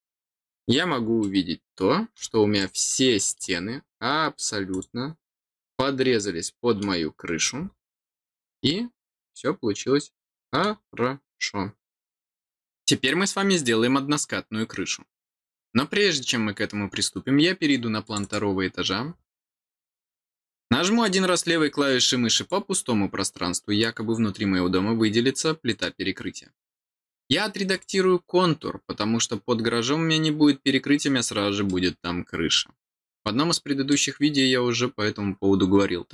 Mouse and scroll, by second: 1.1 middle click, 2.5 middle click, 4.6 click, 5.7-6.7 middle drag, 7.3-10.6 middle drag, 11.8-13.9 scroll down 1, 13.9-18.0 scroll down 1, 18.0 click, 22.3 click, 27.7 click, 31.6 middle click, 33.1 middle click.